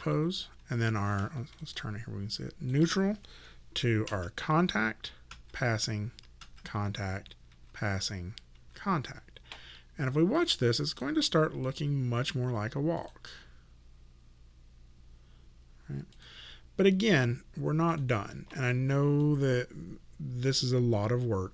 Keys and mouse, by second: 1.6 click, 4.1 shift+., 10.4 click, 10.9 right click, 11.7 click, 16.2 click.